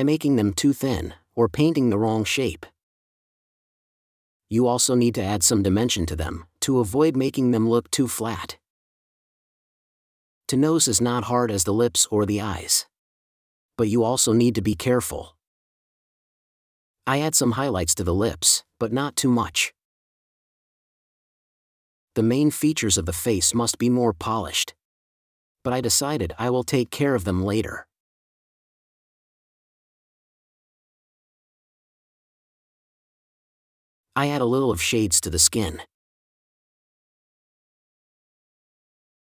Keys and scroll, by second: 4.1 space, 5.1 4, 6.3 space, 9.5 space, 12.6 4, 15.7 4, 19.4 space, 20.5 5, 26.0 super+space, 27.5 space, 29.0 space, 30.5 4, 32.7 space, 38.4 4.